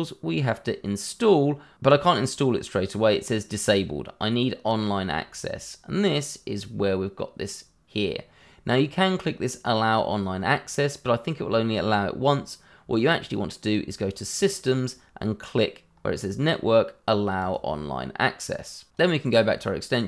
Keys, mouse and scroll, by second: 14.3 click, 15.9-17.4 scroll up 1, 17.4 click.